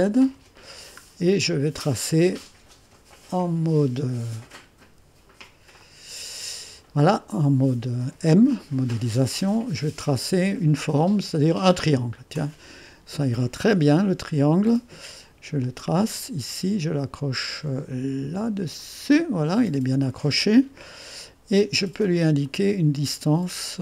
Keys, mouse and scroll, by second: 0.1 click, 1.0-1.5 scroll up 2, 1.5 right click, 5.9 click, 10.8-13.3 drag, 15.6-16.8 drag, 18.8-19.9 drag, 20.9 right click, 22.5 click.